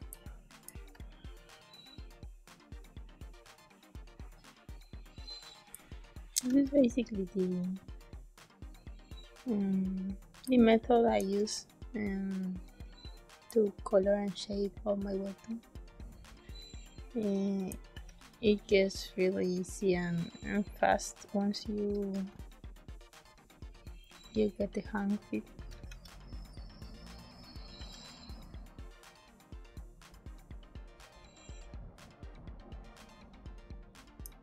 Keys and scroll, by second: 0.0 space, 0.8 b, 5.6 space, 6.4 e, 10.4 space, 13.4 space, 17.8 b, 22.1 g, 25.5 b, 25.8 e, 27.7 b, 34.1 space.